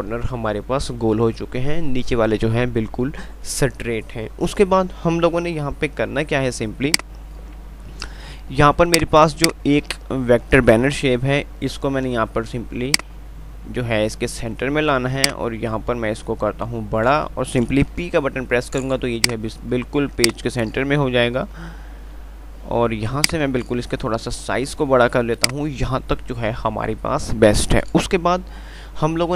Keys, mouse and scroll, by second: 7.1-11.3 drag, 11.3 shift+Page_Up, 18.2 p, 19.4-23.4 drag, 23.4-25.7 drag, 25.7 click.